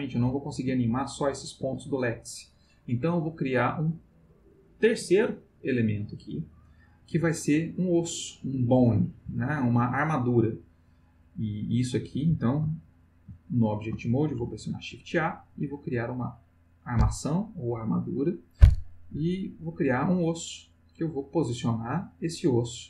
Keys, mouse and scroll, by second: 0.0 click, 0.5 g, 1.6 Escape, 9.3 Tab, 14.4 shift+a, 19.6 click.